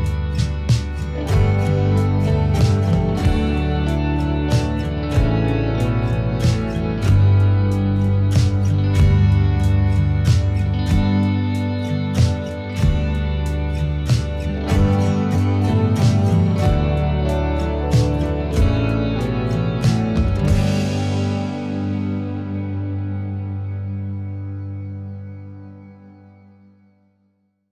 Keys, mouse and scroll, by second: 0.2-1.3 middle drag, 1.3 click, 2.6 scroll down 1, 2.6 middle click, 3.1 click, 4.5 middle click, 5.0-5.8 drag, 5.8 middle click, 6.5 click, 9.4-10.7 middle drag, 10.6 click, 11.2 middle click, 11.9 click, 15.7 scroll up 1, 15.8-17.0 middle drag, 17.2 middle click, 18.4 middle click, 18.5 click, 21.0-21.6 drag, 21.8 click, 23.5 f, 23.7 click, 24.5-25.4 drag, 26.0-27.2 middle drag, 27.0-27.7 drag.